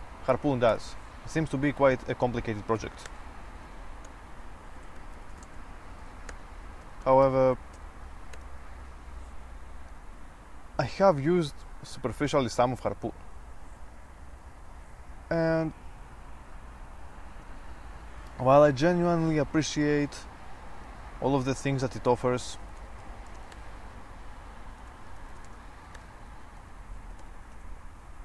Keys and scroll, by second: 0.8 Return, 1.8-9.1 typing, 10.7-11.4 typing, 19.8-23.7 typing, 25.2-28.2 typing.